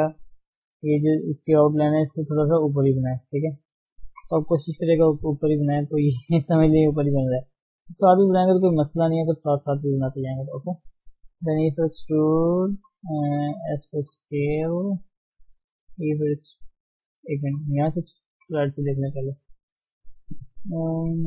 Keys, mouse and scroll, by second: 0.9-3.2 drag, 3.2 right click, 4.0 scroll down 2, 4.3 KP_1, 4.6-5.1 scroll down 5, 5.1 shift+middle click, 5.6-6.2 scroll up 1, 6.2 scroll up 4, 7.3-7.6 scroll down 2, 7.6-7.9 scroll up 2, 7.9 shift+middle click, 8.2-8.6 scroll down 2, 8.6 shift+middle click, 8.8 scroll up 1, 9.8-10.3 scroll down 2, 10.3-10.7 scroll up 1, 11.5 e, 13.0-13.3 scroll up 2, 13.3 shift+middle click, 13.7 s, 15.3 shift+middle click, 15.8 e, 17.6 ctrl+z, 18.5 KP_3, 19.0-19.4 scroll down 3, 19.4 shift+z, 19.7 shift+middle click, 20.1 shift+z, 20.6-21.2 scroll up 1.